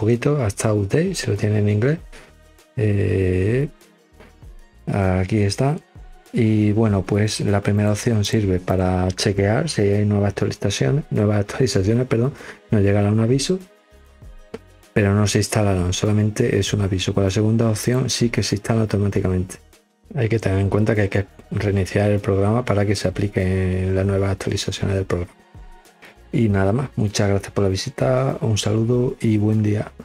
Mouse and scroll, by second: 1.6 scroll down 2, 2.6 scroll up 2, 3.0 scroll down 2, 3.2 scroll up 2, 4.9 scroll up 2, 7.6 click, 8.1 click, 8.6 click, 17.7 click.